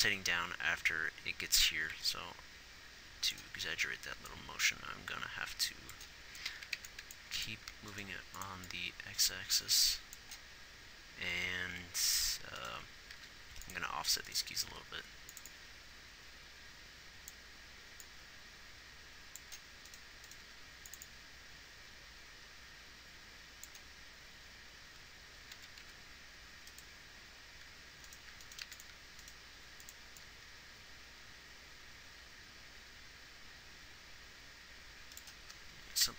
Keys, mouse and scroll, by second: 8.5 x, 13.5 g, 14.9 g, 20.7 g, 29.9 x.